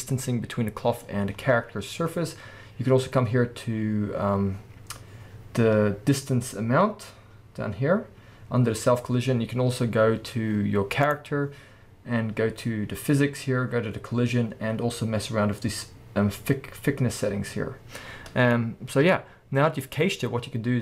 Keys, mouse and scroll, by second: 1.3 scroll up 2, 2.1 scroll up 2, 2.9-4.2 scroll up 2, 4.2-5.2 scroll down 4, 5.2-11.0 middle drag, 5.2 scroll down 1, 7.1-7.5 scroll down 2, 11.0 click, 18.5-19.8 middle drag, 19.8 click.